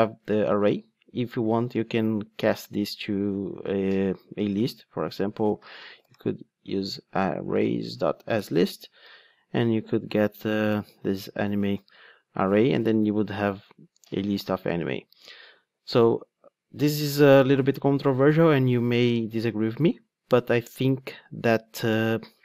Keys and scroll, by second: 4.3 Tab, 8.3 Return, 12.3 alt+Return.